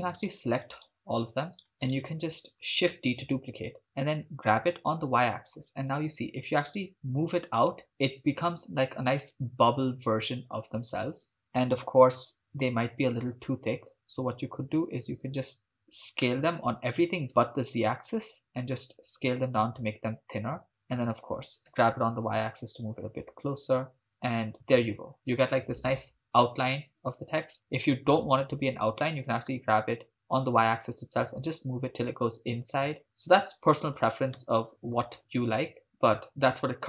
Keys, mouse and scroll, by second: 0.2 right click, 0.8-1.6 shift+right drag, 1.9 shift+right drag, 2.9 shift+d, 4.7 g, 5.0 y, 11.3 shift+click, 12.4 scroll up 3, 13.8-14.2 scroll down 2, 14.2-14.5 scroll up 3, 16.3 s, 17.3 shift+z, 20.7 click, 21.8 g, 21.9 y, 24.6 click, 25.4-25.9 shift+middle drag, 29.3 g, 29.5 y, 34.0 click, 34.4 shift+space, 35.0 shift+space, 36.0 click.